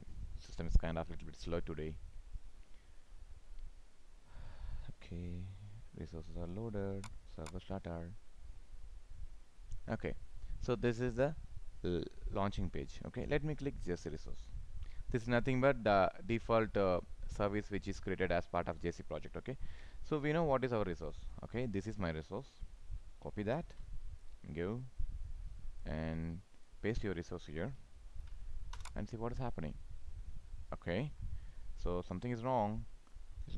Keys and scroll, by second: 23.5 ctrl+c, 28.1 ctrl+v.